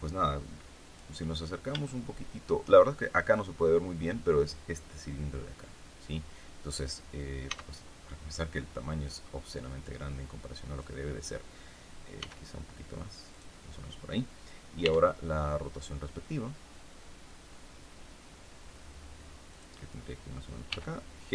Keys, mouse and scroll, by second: 1.8 shift+middle click, 2.1 shift+scroll up 2, 7.4 s, 9.0 click, 9.7-10.9 drag, 12.1 s, 13.3 click, 14.7 r, 19.5 click, 20.6 g.